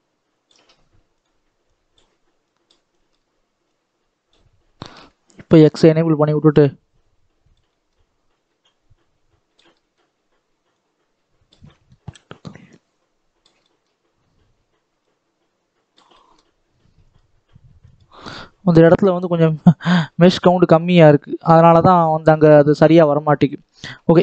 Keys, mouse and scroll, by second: 4.7 ctrl+z, 5.3-7.5 drag, 7.5 shift+middle click, 8.5-9.6 drag, 9.6 shift+middle click, 10.6-11.6 drag, 11.6 shift+middle click, 12.5 click, 13.5-14.9 shift+middle drag, 14.9-16.0 drag, 16.0-17.1 shift+middle drag, 17.1 click, 19.3-20.3 drag, 20.3-21.0 scroll down 11, 21.0 middle click, 21.9 scroll down 1, 22.0-23.5 middle drag, 23.5-24.0 scroll up 1, 24.0 scroll down 2.